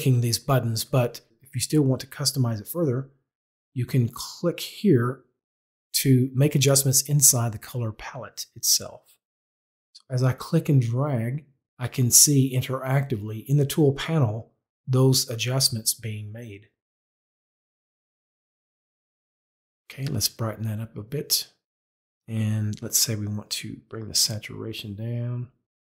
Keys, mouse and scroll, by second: 4.3 click, 9.6 click, 20.0 click, 22.2 click.